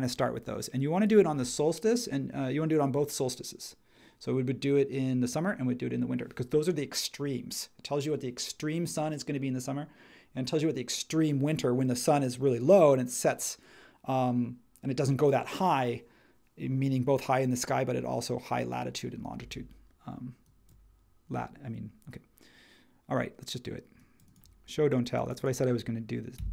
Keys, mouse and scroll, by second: 26.4-26.5 typing.